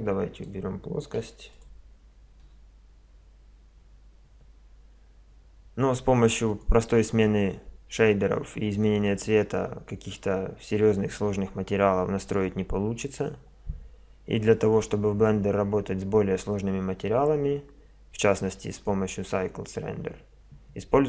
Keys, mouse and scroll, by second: 0.4 click, 1.2 x, 3.8 Escape, 3.8-4.3 drag, 4.4 click, 4.6 click, 6.5-8.2 drag, 8.3 drag.